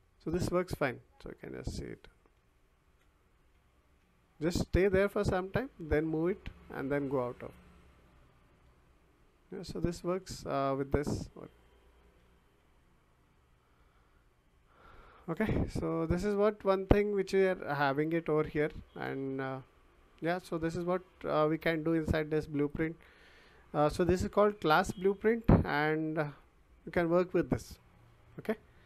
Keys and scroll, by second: 2.3 s, 3.5 w, 7.8 w, 8.6 d, 9.7 w, 10.2 s, 10.8 w, 12.0 a, 12.6 w, 16.6 Escape.